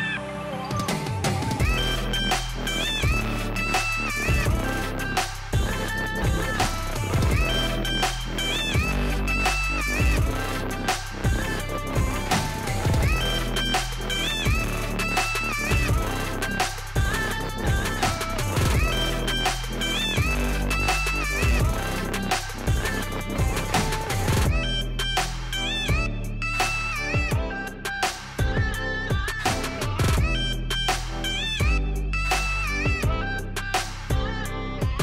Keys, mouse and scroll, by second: 0.2 shift+click, 0.4 shift+click, 0.7 shift+click, 1.0 shift+click, 1.3 middle click, 2.1 shift+click, 2.4 shift+click, 2.7 shift+click, 3.0 shift+click, 3.3 shift+click, 3.5 shift+click, 3.8 shift+click, 4.0 middle click, 4.7 shift+click, 5.0 shift+click, 5.4 shift+click, 5.7 shift+click, 6.0 shift+click, 6.3 shift+click, 6.5 shift+click, 6.8 shift+click, 7.1 click, 7.5 Delete, 8.1 middle click, 8.8 KP_1, 9.2-9.6 scroll down 1, 9.6-10.7 scroll up 1, 10.7 click, 11.2 Tab, 11.6 drag, 12.3 click, 13.9 click, 14.4 click, 14.7-15.2 scroll up 1, 15.2 Tab, 16.0 click, 16.8 ctrl+r, 18.6 click, 19.3 click, 19.6 click, 20.1-21.6 middle drag, 23.8 click, 25.4 s, 26.9 click, 28.0 e, 28.2 Escape, 28.5 s, 29.7 click, 29.9-31.7 middle drag, 31.7 Tab, 31.9 click, 32.1-32.4 scroll down 1, 32.4 middle click, 33.4 click, 33.9-34.3 scroll down 1, 34.4 scroll up 1, 34.6-35.0 scroll down 1.